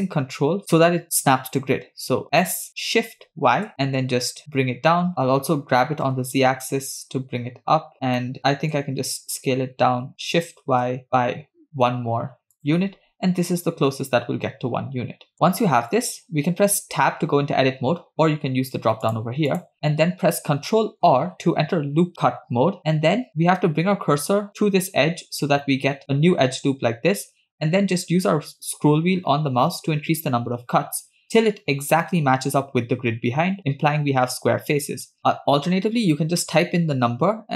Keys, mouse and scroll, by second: 2.7 s, 5.3 g, 7.9 scroll up 3, 8.2 shift+middle click, 9.9 s, 15.1 scroll down 3, 15.3 shift+middle click, 16.0-16.4 scroll down 2, 16.7-17.0 scroll up 1, 17.5 Tab, 19.1-20.4 drag, 21.3 ctrl+r.